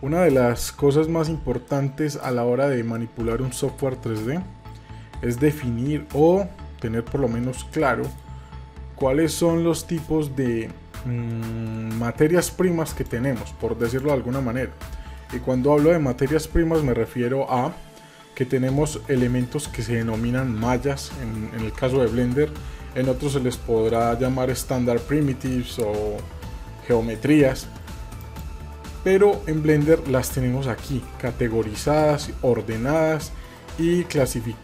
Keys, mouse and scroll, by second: 1.7 middle click, 2.5 scroll up 1, 2.9-3.3 shift+middle drag, 3.6-4.7 scroll up 1, 7.7 middle click, 12.9 click, 13.8 click, 23.4 middle click, 24.2-24.7 scroll up 1, 28.2-34.6 drag.